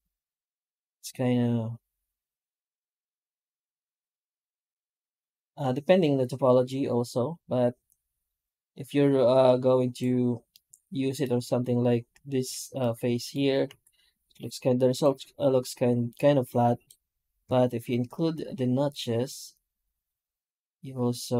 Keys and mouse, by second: 10.4-11.0 middle drag, 11.1 middle click, 12.7 middle drag, 13.0 middle click, 13.1 middle click, 13.6 F9.